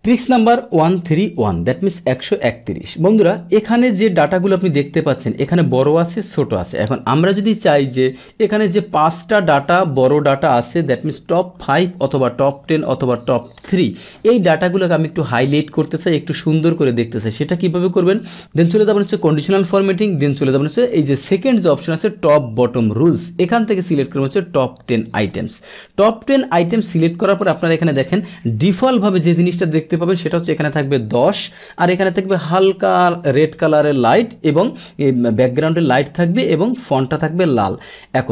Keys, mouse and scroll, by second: 3.3-4.4 drag, 4.8-5.3 scroll down 1, 5.3-7.7 scroll up 1, 7.7-9.9 drag, 10.3 scroll down 1, 10.5 scroll up 1, 11.5-16.0 scroll up 1, 25.2 click, 26.6 click.